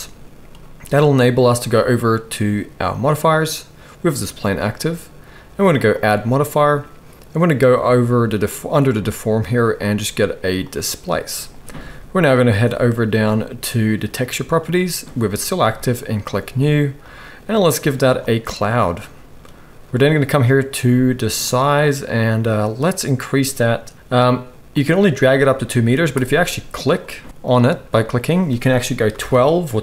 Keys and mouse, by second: 3.0-6.0 drag, 14.2-16.2 drag, 19.1-22.6 drag, 19.1-27.3 middle drag, 19.1-22.6 right drag, 27.3-29.8 drag.